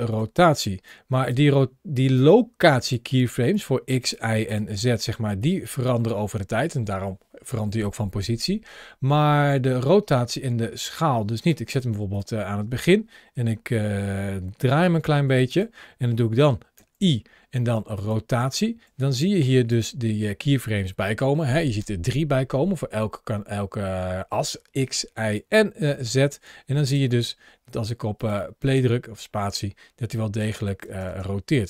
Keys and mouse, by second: 0.7-1.2 drag, 2.0 click, 3.4 click, 3.8 click, 5.2-11.3 drag, 11.6 click, 14.5 r, 14.7 r, 16.6 i, 19.3 ctrl+shift+a, 28.4 space, 30.2 space.